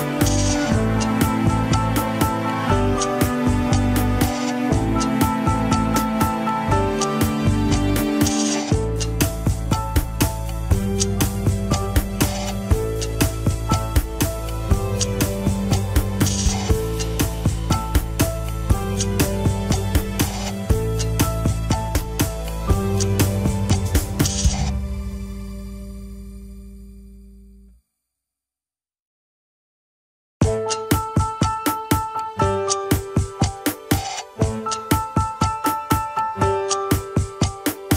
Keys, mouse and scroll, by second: 0.5 r, 2.8 KP_1, 3.2 shift+middle click, 3.6 g, 6.6 shift+s, 7.2 Tab, 7.3 click, 7.9 Tab, 8.3 r, 10.3-11.4 drag, 11.4 r, 16.5 Tab, 16.7 click, 17.5 Tab, 18.1 g, 19.1-20.1 drag, 20.1 g, 23.7 KP_3, 24.2 g, 25.7 KP_1, 26.1 shift+s, 26.8 scroll down 1, 27.0 alt+z, 27.6 alt+z, 28.1 Tab, 28.8 click, 29.7 click, 30.6 Tab, 30.8 scroll up 2, 31.1 r.